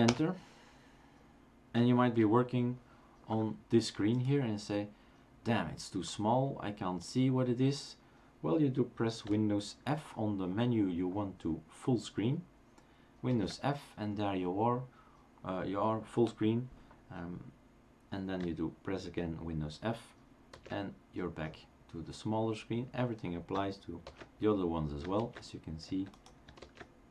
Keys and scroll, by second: 0.1 super+Return, 13.3 super+f, 20.5 super+f, 24.3 super+f, 25.2 super+f, 26.6 super+f.